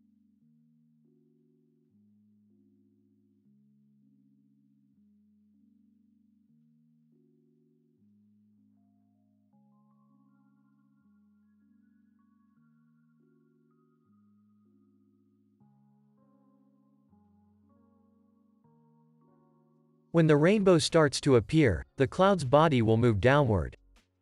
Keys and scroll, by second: 1.2 ctrl+s, 1.9 space, 8.9 ctrl+c, 12.4 alt+x, 14.7 ctrl+s, 18.5 F9, 19.3 ctrl+s.